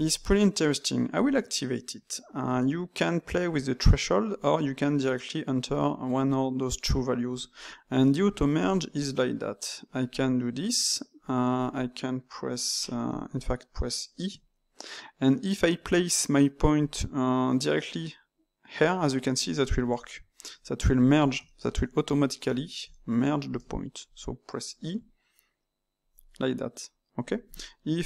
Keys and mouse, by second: 1.1 click, 8.5 click, 9.2 e, 11.5 click, 13.0 Tab, 13.3 click, 14.2 e, 19.6 click, 20.4 e, 21.0-24.0 middle drag, 24.0 click, 24.8 e.